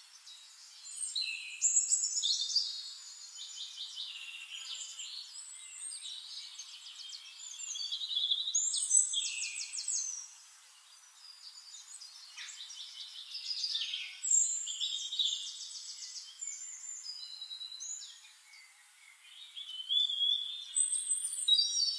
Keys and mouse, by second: 0.3 click, 1.5 click, 5.0-6.1 typing, 7.2 k, 7.4 a, 7.6 l, 7.8 i, 9.0-9.6 typing, 10.5 ctrl+a, 13.9 click, 15.5 click, 17.8 click, 19.0 ctrl+click, 19.4 ctrl+a, 20.9 click.